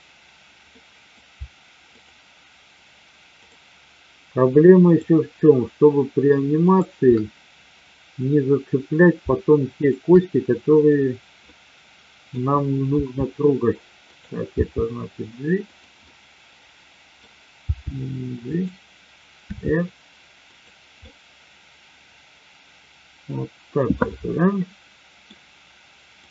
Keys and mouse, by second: 0.8 middle drag, 1.9-3.0 shift+drag, 3.4-4.4 shift+drag, 4.8-5.9 shift+drag, 6.6 shift+click, 11.4-12.3 middle drag, 12.9 r, 14.5 g, 16.0-17.2 middle drag, 17.6 g, 18.6 click, 19.4 r, 21.0-23.9 middle drag, 24.5-25.3 middle drag, 26.2-26.3 drag.